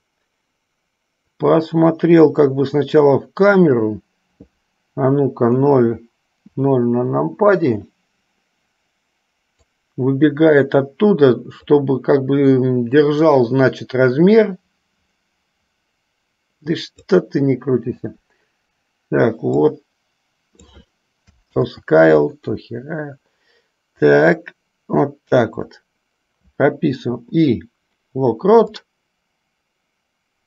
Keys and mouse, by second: 1.7-4.2 drag, 5.7 KP_0, 9.9-12.0 drag, 13.5-17.5 drag, 19.7-20.9 drag, 21.9 ctrl+z, 24.3-26.0 drag, 27.3 i, 29.0-30.4 drag.